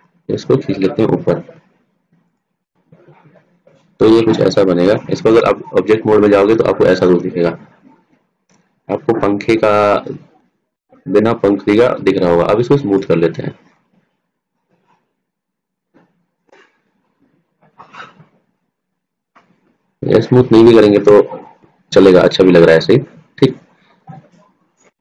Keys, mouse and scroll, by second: 0.1 e, 3.6 middle click, 5.9 Tab, 13.4-14.7 drag, 14.2-15.8 middle drag, 21.6 ctrl+z, 22.4-23.8 middle drag.